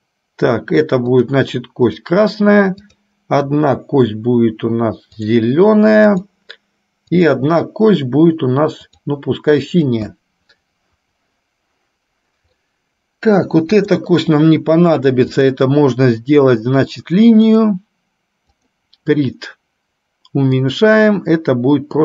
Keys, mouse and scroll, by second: 1.4 click, 2.1 click, 3.0 click, 5.4 click, 6.2 click, 7.2 click, 9.1 click, 9.9 click, 12.7 middle click, 14.0 click, 15.5-17.9 drag, 18.7 click, 20.6-22.0 drag.